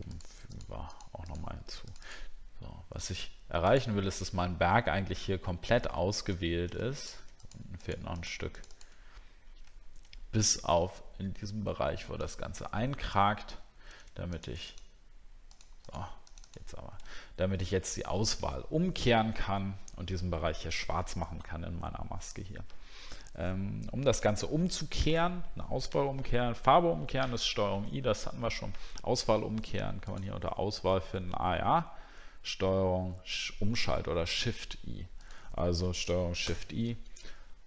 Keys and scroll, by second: 6.4 alt+scroll up 1, 9.7 alt+scroll up 1, 12.3 alt+scroll down 1, 13.7 alt+scroll down 1, 17.2 alt+scroll up 1, 36.5 ctrl+shift+i.